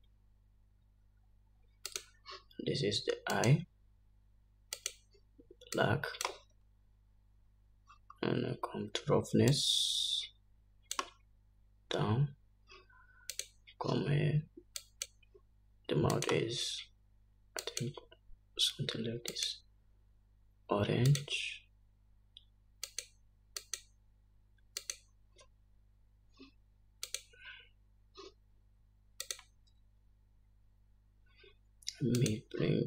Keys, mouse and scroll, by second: 3.1 click, 4.6-5.9 drag, 8.1-8.8 scroll down 3, 9.2-10.1 scroll down 4, 10.9-14.8 drag, 13.3-13.8 scroll down 1, 14.6 scroll down 1, 16.2-17.5 drag, 22.6 click, 28.6 click, 30.9-32.8 drag.